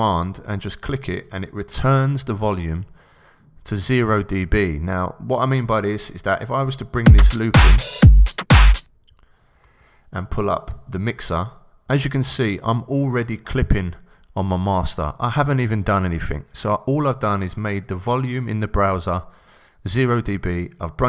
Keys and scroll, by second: 9.6 Return, 10.7 x.